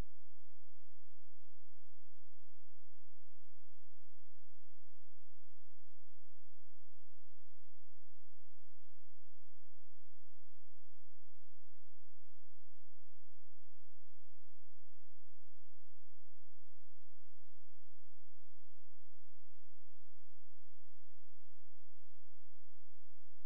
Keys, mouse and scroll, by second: 3.1 click, 12.6 shift+click, 16.3-17.1 scroll up 1, 17.3-18.2 scroll down 1, 18.2-19.3 scroll up 1, 19.3-19.7 scroll down 1, 19.7-21.0 scroll up 1, 21.0 click.